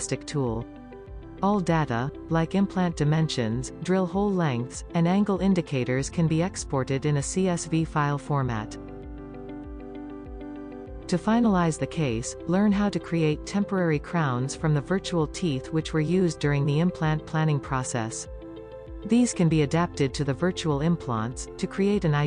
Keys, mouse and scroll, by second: 0.0-3.2 drag, 4.8-9.0 drag, 4.8-9.0 middle drag, 4.8-9.0 right drag, 9.3 scroll up 1, 10.5 click, 12.4-13.0 scroll down 1, 13.4 click, 13.7-14.2 scroll up 2, 14.2 click, 15.0-15.8 scroll down 1, 15.8 click, 16.2 click, 16.8-18.1 drag, 17.8 scroll up 1, 18.4 scroll up 1, 19.0 s, 20.9 middle click, 21.2 g.